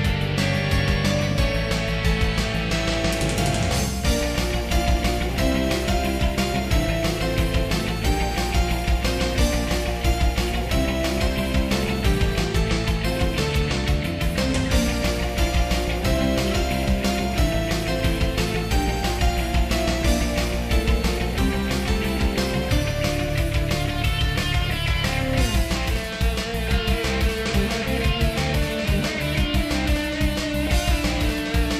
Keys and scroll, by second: 2.2 ctrl+z, 2.8 ctrl+z, 3.1 ctrl+z, 7.2 ctrl+z, 8.4 ctrl+z, 8.6 ctrl+z, 9.4 ctrl+z, 10.5 ctrl+z, 11.2 ctrl+z, 11.6 ctrl+z, 12.3 ctrl+z, 12.6 ctrl+z, 13.1 ctrl+z, 13.6 ctrl+z, 14.2 ctrl+z, 15.1 ctrl+z, 16.4 ctrl+z, 17.0 ctrl+z, 18.2 ctrl+z, 19.3 ctrl+z, 20.6 ctrl+z, 21.0 ctrl+z, 22.1 ctrl+z, 22.6 ctrl+z, 23.1 ctrl+z, 23.8 ctrl+z, 24.3 ctrl+z, 25.6 ctrl+z, 26.1 ctrl+z, 28.5 ctrl+z, 29.5 ctrl+z, 30.1 ctrl+z, 30.7 ctrl+z, 31.6 ctrl+z.